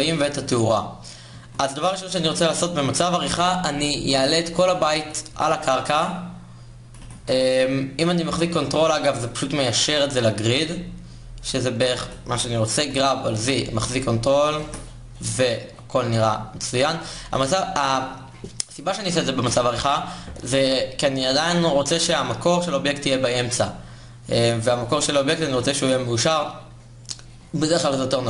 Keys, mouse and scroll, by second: 1.0 Tab, 1.4 a, 2.6 g, 4.9 KP_1, 6.6 g, 12.5 g, 15.3 Tab.